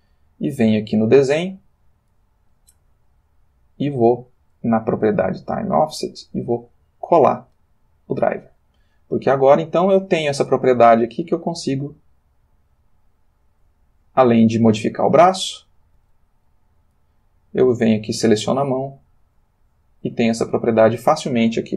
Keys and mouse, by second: 0.9 click, 3.7 click, 6.3 middle click, 7.6 click, 9.4 click, 11.8 click, 12.9 click, 14.0 click, 15.4 click, 16.0 r, 16.8 click, 17.1 middle click, 17.6 click, 18.1 middle click, 19.4 click, 20.3 click, 20.7-21.7 middle drag.